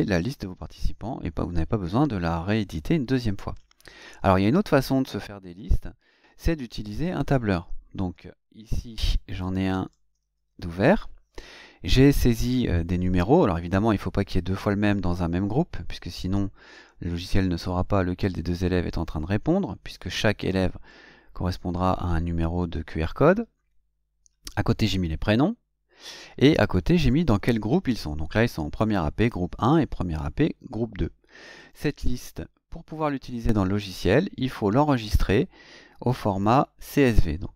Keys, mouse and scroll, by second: 8.3 alt+Tab, 9.9 alt+Tab, 31.6 click, 36.3 click.